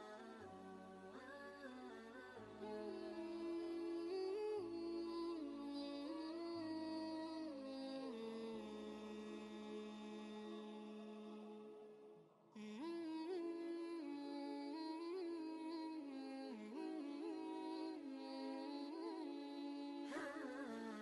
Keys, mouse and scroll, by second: 10.0 ctrl+space, 10.7 ctrl+space, 11.9 space, 13.4 click.